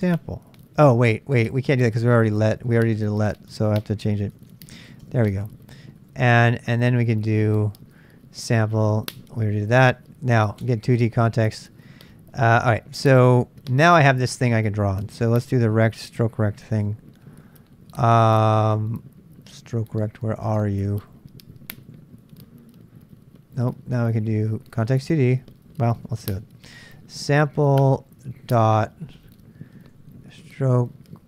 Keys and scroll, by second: 0.0 Return, 0.8 Up, 1.2-2.0 Left, 1.2-2.1 typing, 2.3 Left, 2.5 Left, 2.6 Left, 2.8 Left, 2.9 Left, 3.1 Left, 3.2 Left, 3.7 Left, 4.0 typing, 5.0 Return, 5.9 Up, 6.1 Up, 10.6 Return, 15.6-20.5 Up, 20.5 Down, 20.7-25.3 Down, 26.4-31.2 typing.